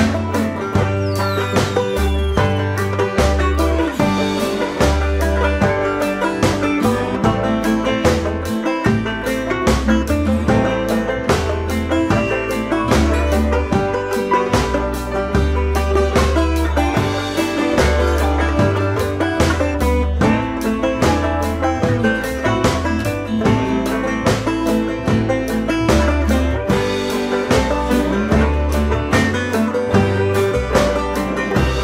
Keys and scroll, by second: 6.0 Down, 12.3 BackSpace.